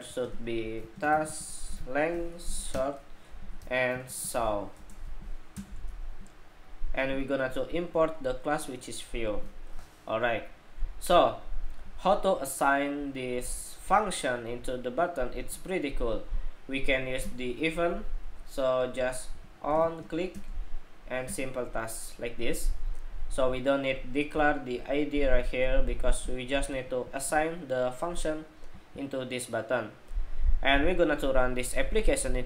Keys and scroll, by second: 7.4 alt+Return.